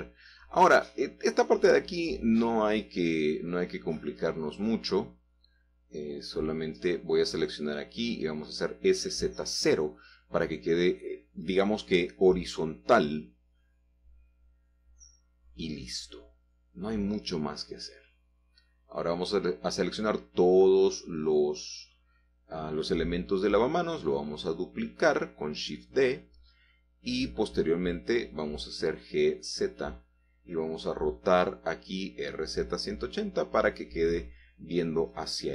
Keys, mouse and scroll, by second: 0.2-1.2 shift+middle drag, 2.7 g, 3.1 z, 5.7 shift+click, 7.6 a, 7.7 a, 8.4 alt+shift+click, 9.7-10.5 typing, 11.0 Return, 12.5 g, 13.0 z, 15.0 shift+click, 15.6-16.1 scroll down 1, 15.9-17.5 middle drag, 17.6 Tab, 18.1 middle click, 18.9 scroll down 1, 20.1 click, 21.5 middle click, 23.7 shift+d, 25.0 Escape, 25.3 KP_7, 26.5 shift+middle click, 28.7 g, 29.3 shift+z, 33.2-34.3 typing, 34.9 Return.